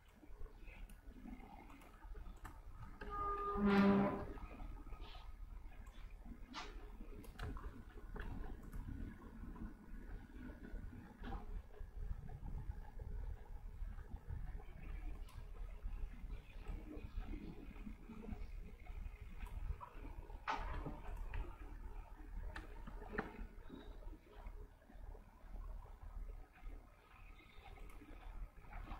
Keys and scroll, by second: 2.1 v, 3.1-4.3 typing, 8.4 v.